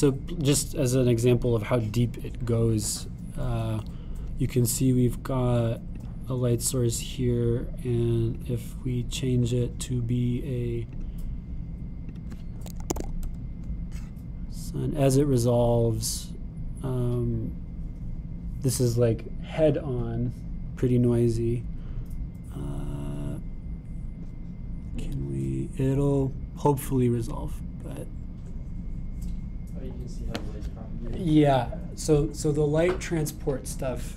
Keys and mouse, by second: 20.8-34.1 drag.